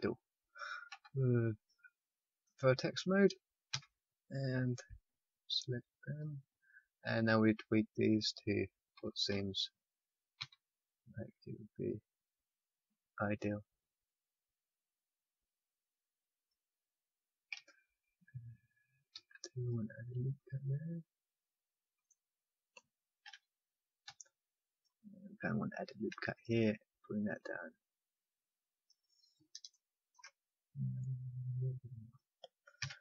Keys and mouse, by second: 0.9 z, 3.7 click, 3.7 a, 4.8 b, 7.1-10.3 drag, 10.3 s, 17.5 a, 19.1 ctrl+r, 23.2 ctrl+z, 24.0 z, 25.8 ctrl+r, 30.8-32.8 drag, 32.8 a.